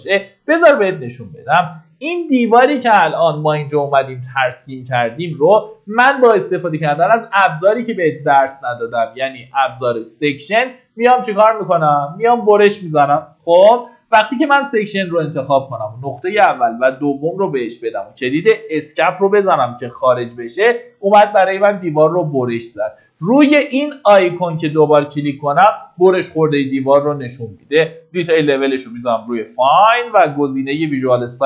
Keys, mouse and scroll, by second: 1.9 middle click, 2.7-3.7 scroll up 1, 3.7 click, 17.7-18.5 scroll down 1, 18.7 Escape, 24.2 click, 25.7-26.1 scroll down 1, 27.8 click.